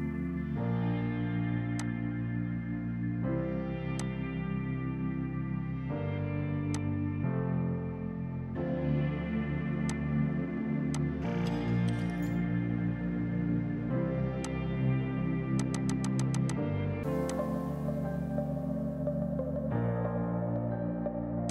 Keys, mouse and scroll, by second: 0.2 KP_5, 0.3 KP_Enter, 1.9 click, 2.6 KP_1, 2.9 KP_Enter, 4.0 click, 5.3 KP_Enter, 6.8 click, 7.5 KP_1, 7.8 KP_Enter, 8.0 KP_3, 9.9 click, 12.2 z, 14.5 click, 18.5 KP_5, 18.6 KP_0, 18.8 KP_Enter, 19.9 space.